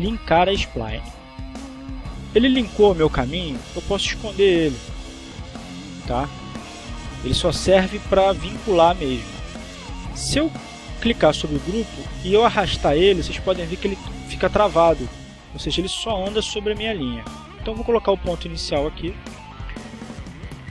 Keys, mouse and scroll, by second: 1.0 click, 5.3 click, 10.8 click, 12.6-16.3 drag, 16.5-19.0 drag, 20.6 click.